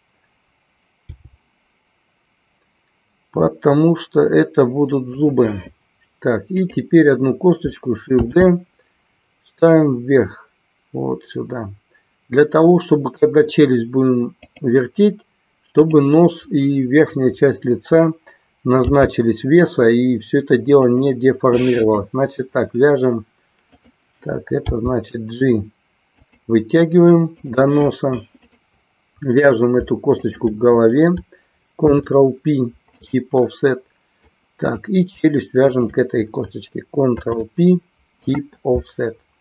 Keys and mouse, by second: 5.8 click, 6.7-7.7 drag, 8.4 shift+d, 16.0-17.0 drag, 21.9-22.9 drag, 23.8-24.8 drag, 26.2 click, 30.4 shift+click, 34.2 click, 35.7-36.7 shift+drag.